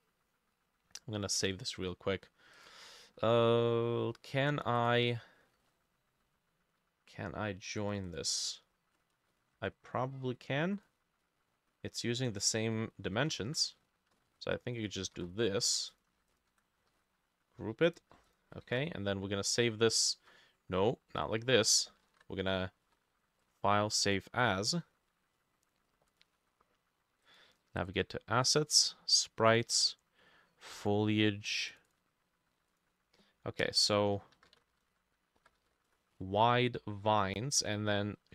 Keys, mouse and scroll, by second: 3.6-5.9 drag, 3.6 middle click, 8.1-11.5 drag, 9.2 ctrl+middle click, 9.3 ctrl+a, 13.3-16.2 ctrl+drag, 13.3-14.6 ctrl+middle drag, 13.4 ctrl+a, 14.2 ctrl+x, 15.1 ctrl+middle click, 15.2 ctrl+v, 17.0 ctrl+g, 18.3 double click, 18.7 ctrl+s, 20.2 Escape, 22.1 ctrl+alt+e, 22.5-24.9 drag, 22.9 Escape, 28.7-31.7 drag, 31.9-33.9 drag, 34.2-36.3 typing, 34.4-38.3 drag, 34.9 shift+middle click, 37.5 Escape.